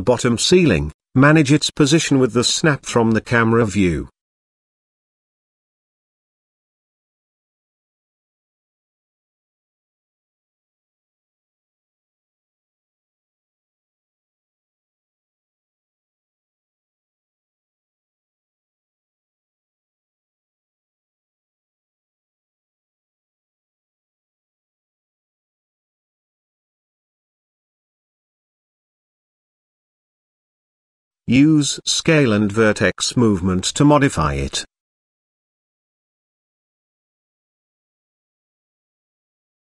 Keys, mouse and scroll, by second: 1.2 s, 2.8 middle click, 3.3 shift+scroll up 1, 4.0-4.4 shift+middle drag, 5.0-5.6 scroll up 1, 6.0-6.5 scroll up 1, 6.7 s, 8.6 s, 10.5 g, 12.5-13.5 middle drag, 13.7-14.1 shift+middle drag, 14.6 middle click, 15.4 shift+middle click, 15.9 middle click, 16.4 shift+middle drag, 17.1-18.5 middle drag, 20.2-20.7 middle drag, 21.0 KP_0, 23.7 s, 26.6 s, 28.9 g, 31.2 Tab, 32.2 click, 32.6 z, 33.4 click, 34.4 g, 37.1 Tab, 37.7 z, 39.0-39.3 middle drag.